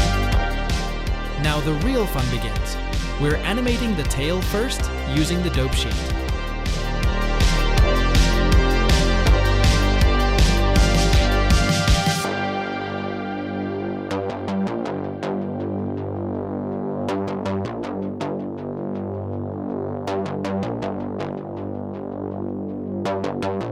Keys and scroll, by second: 0.5 ctrl+Tab, 3.8 h, 7.2 h, 9.8 a, 13.1 r, 13.4 z, 13.6 z.